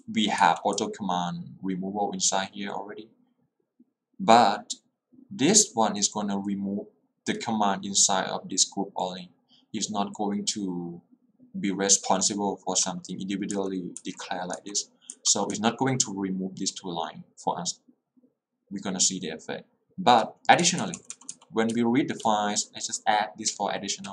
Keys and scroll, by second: 0.0-1.2 typing, 12.3 k, 14.1 j, 14.7 k, 15.2 j, 21.8 h, 22.4 l.